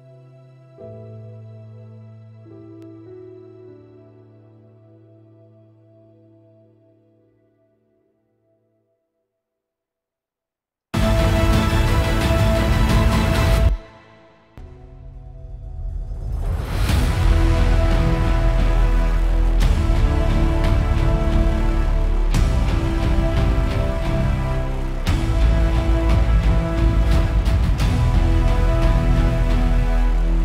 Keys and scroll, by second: 8.3 F7, 10.8 space, 11.1 space, 13.9 space, 15.4 super+s, 18.4 super+=, 29.9 super+=.